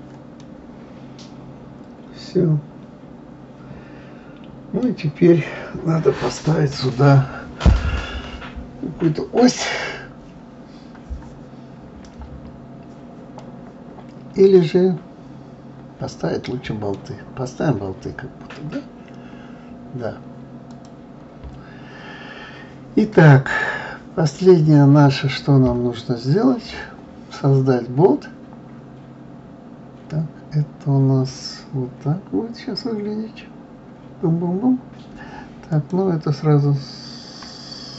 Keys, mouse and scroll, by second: 0.4-3.4 middle drag, 5.0-5.3 scroll down 2, 5.3-6.0 scroll up 6, 6.2-9.2 scroll down 1, 12.2-13.4 scroll down 3, 13.4-16.4 middle drag, 17.1-18.0 scroll down 2, 18.0-18.9 scroll up 5, 19.0-19.6 scroll up 2, 19.6-20.7 scroll down 2, 20.7 click, 21.5-23.7 scroll down 1, 24.2 click, 35.7 click.